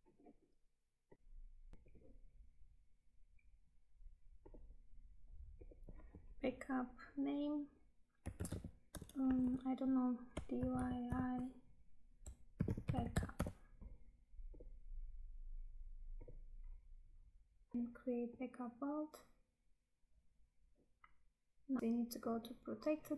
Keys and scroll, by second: 17.7 Tab, 21.8 Tab.